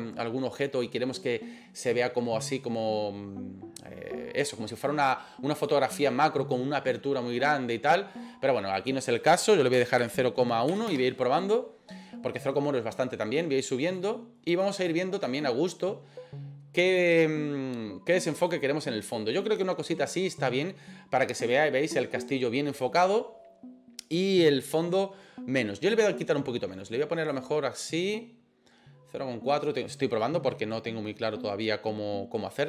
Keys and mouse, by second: 14.6 click, 15.4 click, 27.3 click.